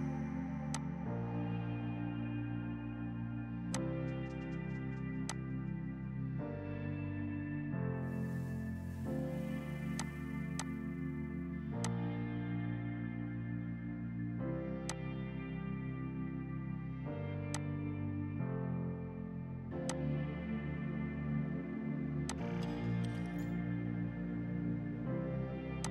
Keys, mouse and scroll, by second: 0.8 click, 4.1 F6, 5.3 click, 7.5 space, 8.0 F3, 9.6 Delete, 10.0 click, 10.5 F2, 10.6 click, 13.8 shift+Page_Down, 14.8 F2, 14.9 click, 25.8 click.